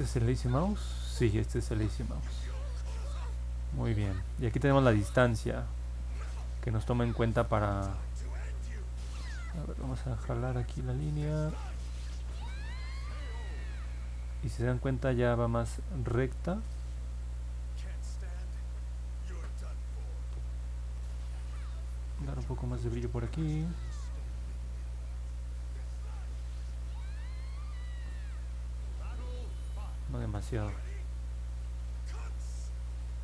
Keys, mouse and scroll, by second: 1.5 click, 9.8 click, 11.0-13.0 drag, 14.0 ctrl+z, 15.1 click, 17.0 click, 26.0 click, 26.3 click, 26.7 click, 29.3 ctrl+z, 29.7 ctrl+z, 30.2 ctrl+z.